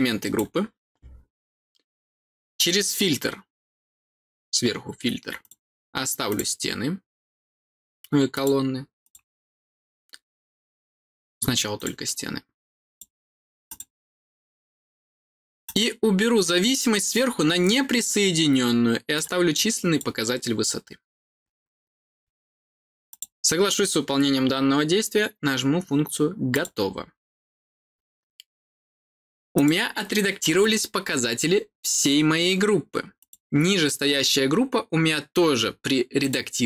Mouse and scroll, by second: 2.5 click, 5.3 click, 6.2 click, 8.3 click, 8.9 click, 11.7 click, 12.8 click, 13.6 click, 15.6 click, 16.6 click, 19.1 click, 19.5 click, 23.0 click, 26.4 click, 29.5 click, 30.5-31.8 middle drag, 33.1 click, 36.1 click.